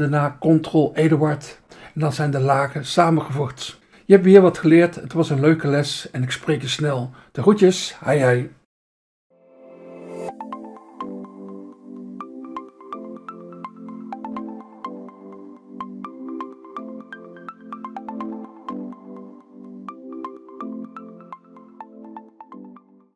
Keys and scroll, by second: 1.1 ctrl+e.